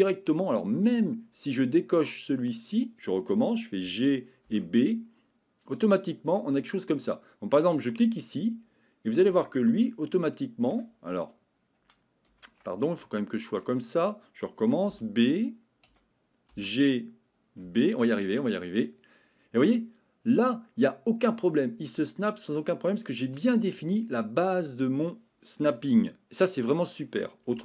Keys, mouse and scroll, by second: 0.8 Escape, 2.1 click, 3.8 g, 7.7 click, 12.3 Escape, 13.2 shift+middle click, 14.9 b, 23.8 Escape.